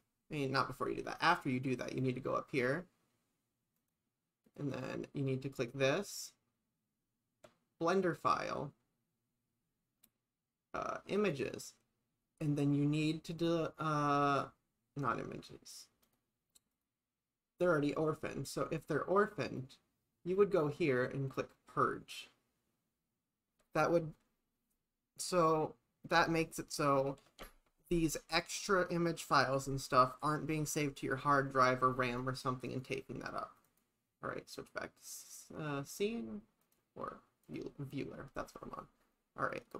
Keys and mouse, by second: 3.8 click, 4.7 click, 5.6-8.4 drag, 11.2 click, 16.1 click, 16.8-18.0 drag, 19.6 click, 32.1 click, 32.7-33.8 drag, 34.6 click, 36.7-37.6 drag.